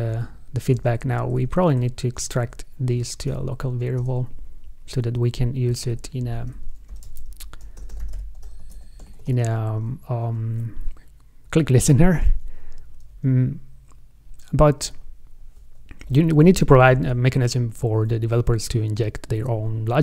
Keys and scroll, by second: 1.0 shift+super+Left, 1.8 super+1, 5.9 super+Right.